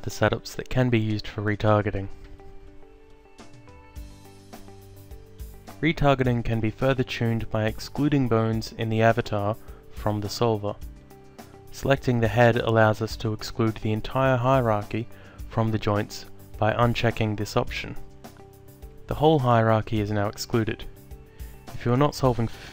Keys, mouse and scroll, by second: 0.3 alt+click, 2.2 click, 3.3 alt+click, 5.1 alt+click, 6.2 click, 9.0 click, 13.2 click, 16.7 click, 18.0 alt+click, 19.7 alt+click, 20.9 click, 22.6 click.